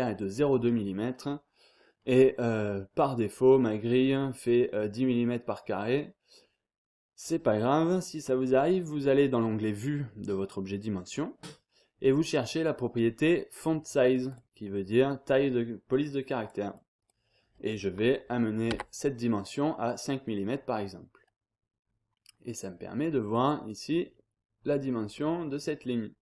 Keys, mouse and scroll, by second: 0.9 scroll down 2, 1.2-1.7 scroll up 1, 1.9-2.5 scroll up 2, 2.5-3.0 scroll down 2, 3.0-3.5 scroll up 2, 4.0 scroll down 2, 4.2-4.9 scroll up 2, 5.3-5.7 scroll down 2, 5.7-6.4 scroll up 1, 8.5 click, 14.3 click, 16.4 click, 18.7 5, 21.2-21.8 scroll up 1, 21.8-22.5 scroll down 1, 22.5-23.0 scroll up 1, 23.0-23.3 scroll down 1, 23.3-23.8 scroll up 1, 23.8-24.5 scroll down 1, 25.1-25.7 scroll down 1.